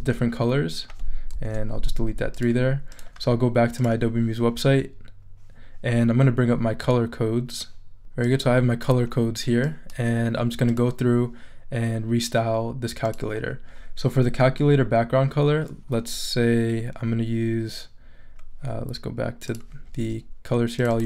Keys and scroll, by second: 1.3 BackSpace.